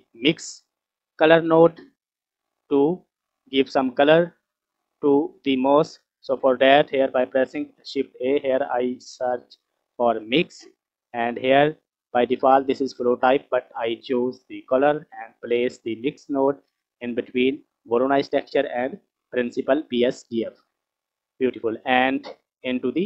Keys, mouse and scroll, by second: 0.6 click, 1.2-1.7 scroll up 5, 2.2-2.7 scroll down 2, 2.4 middle click, 4.9-6.8 scroll up 2, 7.7 shift+a, 13.3-14.7 drag, 15.8-17.5 drag, 18.5-20.2 drag, 21.0-22.2 scroll up 3, 22.2-23.0 drag.